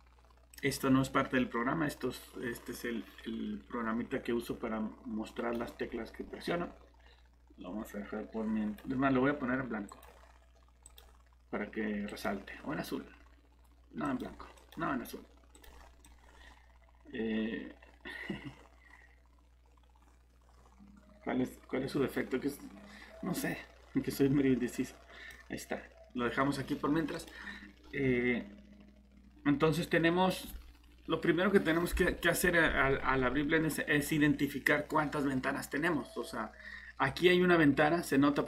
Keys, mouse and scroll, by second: 1.6 click, 8.5 right click, 10.3 click, 14.7 click, 17.3 click.